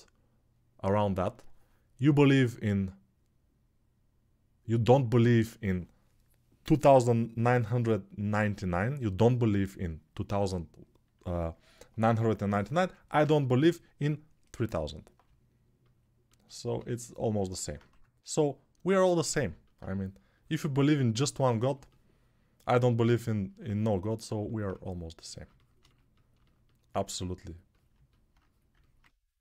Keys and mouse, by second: 17.6 1.